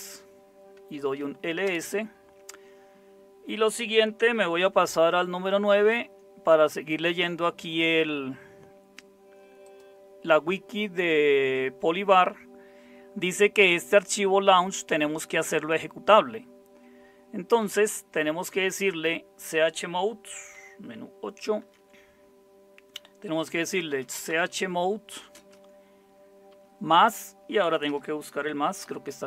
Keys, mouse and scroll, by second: 0.9 typing, 1.6 Return, 5.6 super+9, 21.6 super+8, 23.5-25.3 typing, 26.5 typing, 27.9-28.8 typing.